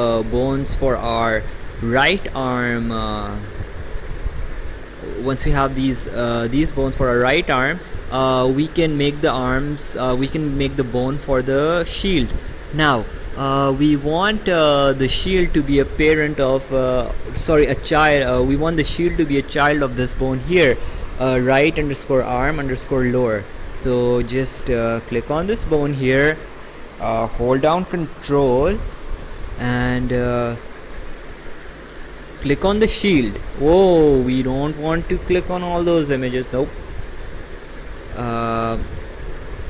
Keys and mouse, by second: 25.0 click, 32.8 ctrl+click, 36.4 Escape.